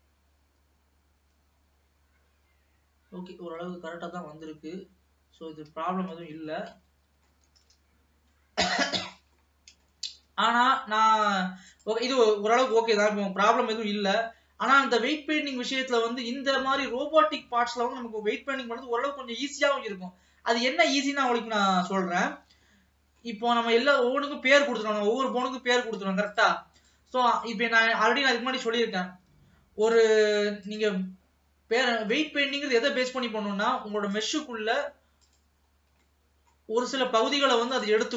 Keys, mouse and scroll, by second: 6.6-6.9 scroll down 1, 6.9-8.0 middle drag, 8.0 ctrl+s, 8.1 scroll down 1, 9.5 middle click, 10.4 ctrl+s, 11.1 click, 12.7 click, 13.1-13.7 scroll up 2, 13.7 ctrl+s, 13.8 middle click, 14.6 scroll down 3, 15.2 middle click, 15.8-18.8 scroll up 2, 22.4-22.8 scroll up 2, 22.8-23.9 middle drag, 23.9 ctrl+s, 26.3-27.6 drag, 28.4 scroll down 1, 28.6-30.0 middle drag, 30.0 click, 30.7 click, 34.3-35.8 drag, 35.8-36.1 scroll up 2, 36.1-37.8 middle drag, 37.8-38.1 drag.